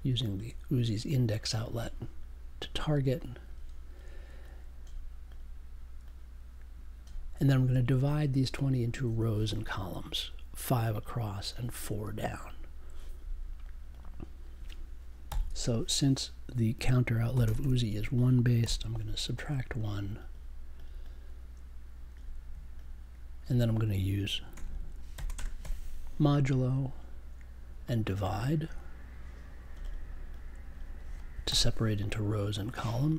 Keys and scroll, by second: 15.2 n, 17.3 -, 17.4 space, 17.5 1, 18.6 super+j, 25.1 shift+5, 25.3 space, 31.4 /.